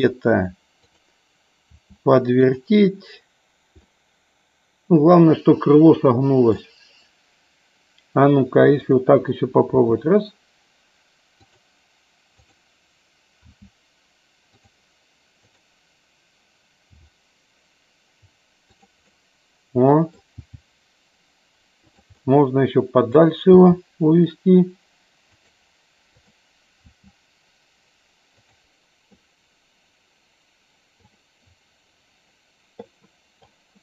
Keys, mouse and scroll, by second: 0.0 click, 2.6 click, 4.0-6.6 middle drag, 9.0 click, 11.5 click, 12.5 click, 14.6 click, 18.8 click, 19.1-20.3 middle drag, 21.8 click, 22.4 middle click, 25.5 click.